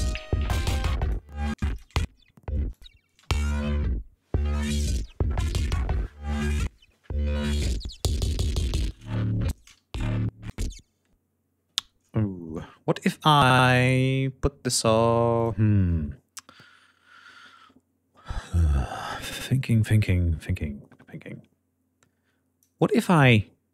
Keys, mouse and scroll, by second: 0.3 click, 0.9 space, 1.0 click, 2.0 space, 2.1 click, 9.8 ctrl+space, 12.0 ctrl+scroll down 2, 14.9 click, 19.0-22.2 drag.